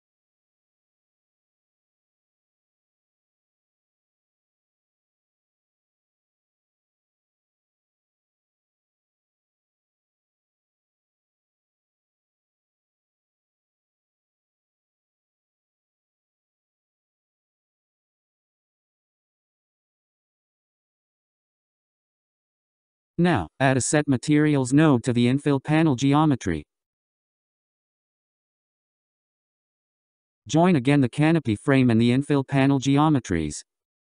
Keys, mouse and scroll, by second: 5.6-6.9 scroll up 11, 6.9-10.3 drag, 13.9-15.9 scroll down 11, 15.9-18.3 drag, 19.7 click, 21.2-23.0 scroll down 8, 23.0 scroll down 3, 23.5-25.4 scroll up 9, 25.4 shift+a, 30.9 scroll down 3, 32.7-34.1 drag.